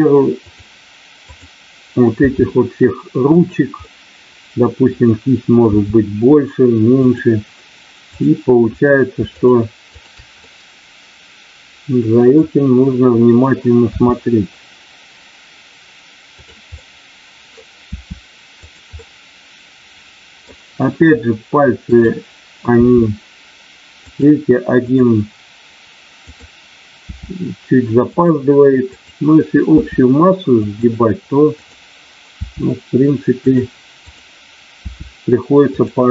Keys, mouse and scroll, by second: 0.4 click, 2.2 r, 3.4 click, 3.7-4.9 middle drag, 5.6 r, 7.0 click, 8.1 click, 9.7 shift+click, 13.8 r, 16.7 middle click, 18.0 r, 18.8-20.5 middle drag, 21.8 click, 22.7 r, 24.7 click, 26.2 click, 27.0 r, 29.7 r, 30.5 click, 31.5 click, 34.9 r, 35.8 click.